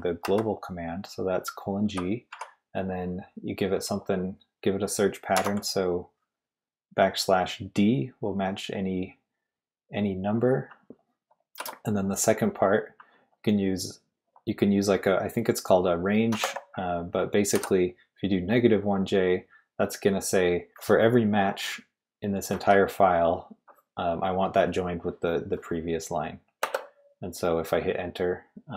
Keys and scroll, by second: 0.2 shift+;, 1.9-2.3 typing, 5.1-5.9 typing, 11.6 typing, 16.1-17.5 typing, 26.4-27.9 typing.